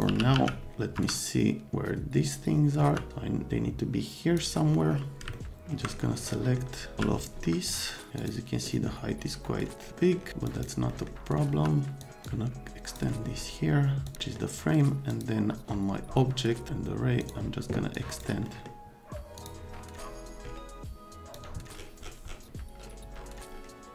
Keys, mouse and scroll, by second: 0.1 t, 0.3 z, 0.9 F3, 2.8 F3, 3.1-4.4 middle drag, 5.3 middle click, 6.3 middle click, 7.0 z, 7.7 click, 8.1 click, 9.9 right click, 10.4 click, 10.9 right click, 11.5 F3, 12.0 click, 12.2 click, 14.1 click, 14.2 middle click, 15.1 click, 15.5 F3, 17.2 click, 17.9 click, 18.5 middle click, 19.4 middle click, 21.3 click, 23.7-23.9 drag.